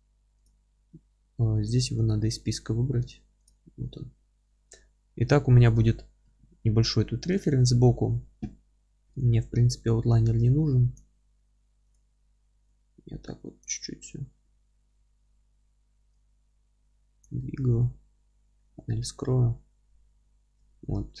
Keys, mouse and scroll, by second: 2.2-18.7 drag, 18.3 n, 18.7-21.2 middle drag, 19.1-19.5 scroll down 2, 20.0-20.5 scroll down 2, 20.5 ctrl+space.